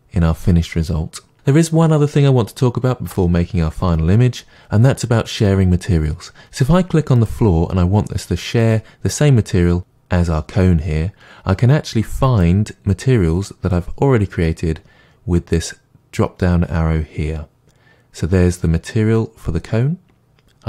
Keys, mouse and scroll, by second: 7.3 click.